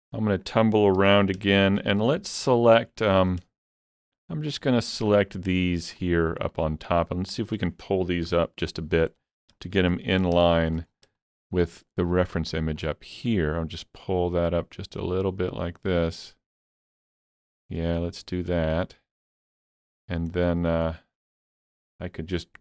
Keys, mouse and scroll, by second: 1.0 alt+z, 1.2 scroll down 2, 1.6 shift+middle click, 1.9-4.5 shift+middle drag, 4.0 shift+click, 4.5 shift+click, 5.1 shift+click, 6.0 shift+click, 6.5 shift+click, 7.1 shift+click, 8.3 KP_3, 9.2 shift+middle click, 10.0 alt+z, 10.1-11.1 scroll up 4, 10.5 shift+middle click, 11.3 shift+middle click, 12.8-18.8 drag, 18.8 shift+click, 19.4 middle click, 20.1-20.4 scroll down 2, 20.4-21.7 middle drag, 20.9-21.3 scroll down 1, 21.7 shift+middle click.